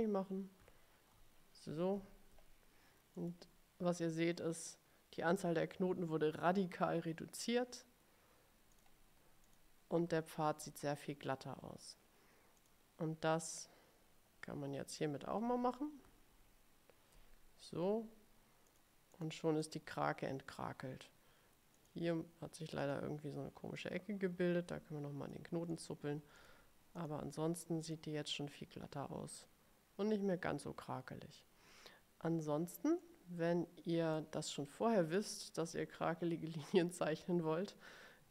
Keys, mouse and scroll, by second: 0.7 ctrl+z, 3.3 click, 8.9 click, 9.6 click, 12.7 click, 16.5 ctrl+l, 18.8 click, 19.2 click, 19.8 click, 21.9 click, 22.9 click, 23.9-25.6 drag, 25.8 click, 26.5 click, 27.1 click, 28.0 click, 33.1-34.5 drag, 34.6 click, 36.8 click.